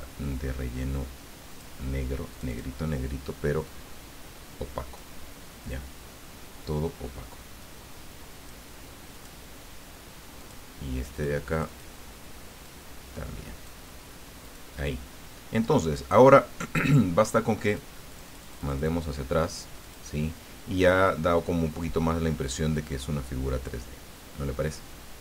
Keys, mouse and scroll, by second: 1.5 click, 2.3 click, 3.6-5.1 drag, 7.6-8.6 drag, 9.1 click, 10.4 click, 10.9 click, 11.5 click, 12.6-13.8 drag, 14.4 click, 17.6 click, 18.1 click, 19.8 click, 22.6-24.5 drag.